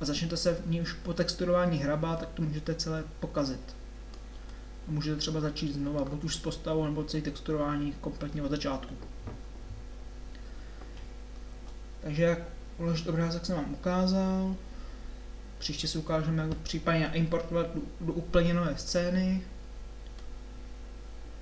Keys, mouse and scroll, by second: 0.6-2.2 middle drag, 11.7 Tab.